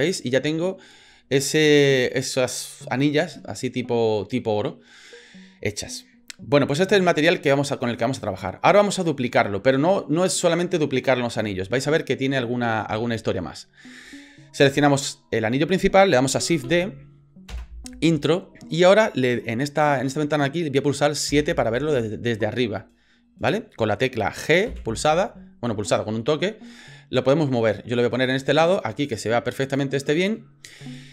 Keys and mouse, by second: 7.8 middle click, 12.6 middle click, 13.2 shift+middle click, 13.7 shift+middle click, 16.7 shift+d, 21.3 KP_7, 22.7 shift+middle click, 24.7 g.